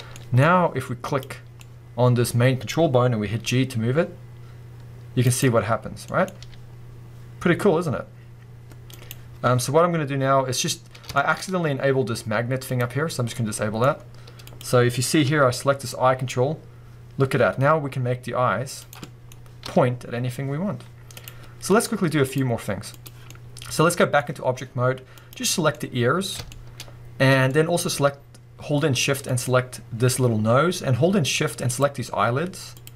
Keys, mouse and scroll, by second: 0.1-1.1 middle drag, 0.4-1.1 scroll up 2, 1.1 click, 1.6-5.4 middle drag, 2.8-3.5 scroll down 2, 3.5 g, 5.4 right click, 5.7-6.0 scroll down 1, 6.0-9.1 middle drag, 6.4 g, 9.1 right click, 11.1-12.7 shift+middle drag, 11.4-12.6 scroll up 2, 12.6 scroll up 1, 12.7 click, 13.5-14.5 middle drag, 14.5 click, 14.9 scroll down 1, 15.2 g, 18.9 right click, 19.0-21.2 middle drag, 19.3 scroll up 2, 19.6 g, 21.2 right click, 21.4-22.2 scroll down 2, 22.2-23.3 drag, 23.3-25.1 middle drag, 25.1 click, 25.7-29.2 middle drag, 27.8-28.6 scroll up 2, 28.6-29.2 scroll up 1, 29.2 shift+click, 31.7 shift+click, 32.8 shift+click.